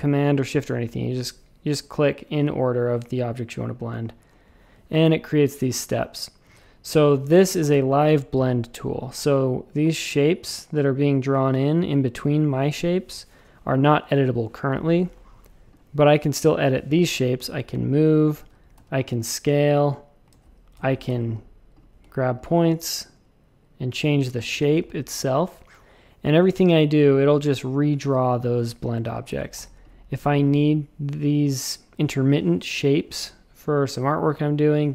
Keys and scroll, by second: 3.9 space, 7.0 shift+super+a, 7.6 v, 15.3 a, 18.4 super+z, 18.7 s, 20.3 super+z, 20.8 shift+super+a, 24.5 shift+super+a, 24.7 space, 29.0 super+z, 29.3 shift+super+a, 29.5 v.